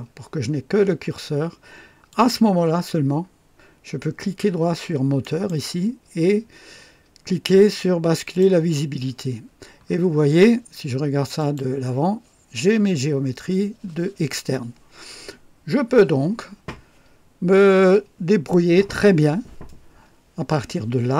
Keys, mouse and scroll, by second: 2.0 click, 5.2 click, 8.2 click, 9.7-10.0 scroll down 2, 11.3 click.